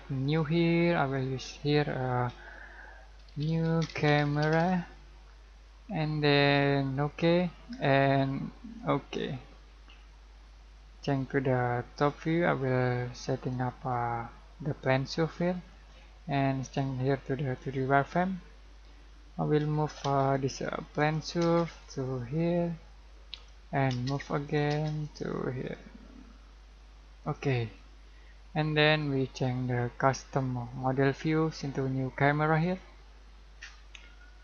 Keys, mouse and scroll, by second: 0.3 click, 3.0-5.1 typing, 7.0-12.0 drag, 12.0-15.4 drag, 15.4 middle click, 16.6 click, 18.5-18.8 scroll up 1, 19.6 m, 20.1 space, 20.6 click, 21.5 space, 21.8 click, 24.0 space, 24.2 click, 24.7 space, 25.1 click, 27.8 scroll down 1, 28.9 click, 28.9 click, 32.6 click.